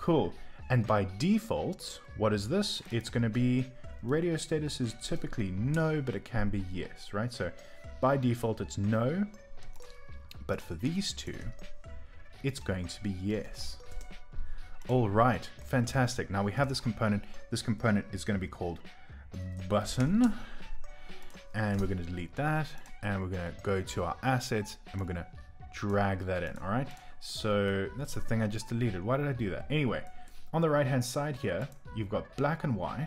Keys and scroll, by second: 10.2 typing, 13.1-14.8 typing, 19.2-20.5 typing, 21.7 BackSpace, 24.5 typing, 27.2 typing, 32.6 typing.